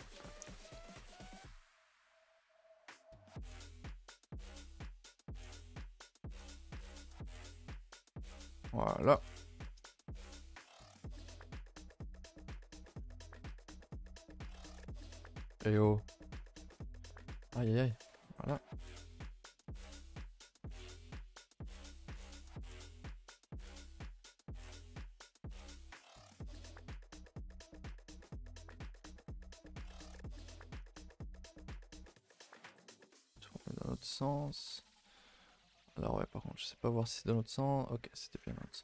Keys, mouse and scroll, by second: 0.4 Tab, 1.1 a, 1.2 a, 1.5 alt+Left, 2.1 s, 4.5 z, 4.6 c, 5.7 s, 8.9 middle click, 9.3-10.1 scroll up 6, 9.6 shift+middle click, 10.1 shift+middle click, 10.6 scroll up 1, 10.7 a, 10.9 a, 11.9 a, 12.1 a, 12.2 shift+middle click, 12.4 scroll up 3, 12.6 a, 12.7 a, 13.9 c, 17.2-18.5 typing, 19.3 shift+middle click, 19.5-19.8 scroll up 4, 19.8 shift+middle click, 20.7 r, 21.1 g, 22.3 i, 24.2 e, 25.5 x, 25.8 2, 26.7 s, 28.1 z, 29.2-32.3 typing, 34.5 r, 37.4 z, 38.3 z, 38.6 r.